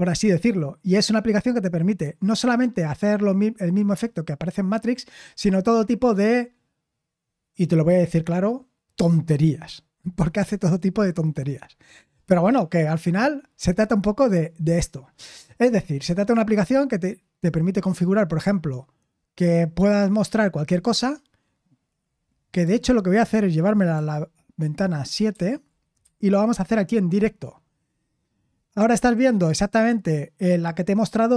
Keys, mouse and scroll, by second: 1.0-2.6 scroll down 1, 4.6-10.6 scroll down 1, 10.6-11.4 scroll down 1, 11.4-14.3 scroll down 1, 14.3-23.9 scroll down 1, 23.9-25.3 scroll down 1, 25.3 super+/, 26.0 super+7.